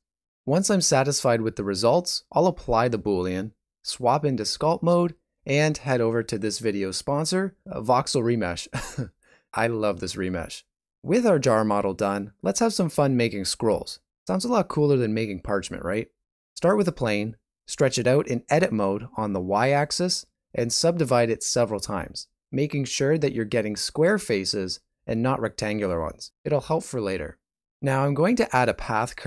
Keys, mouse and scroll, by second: 1.3 scroll up 2, 3.0 ctrl+a, 4.1 click, 6.1 middle click, 6.5 shift+middle click, 7.4 middle click, 8.2 middle click, 8.8 click, 12.2 click, 13.0 middle click, 13.5 alt+a, 14.0 right click, 14.3 x, 15.3 ctrl+middle click, 17.7 ctrl+r, 19.3 middle click, 19.8 a, 21.3 w, 23.0 click, 23.5 click, 25.4 click, 27.1 middle click, 28.2 g.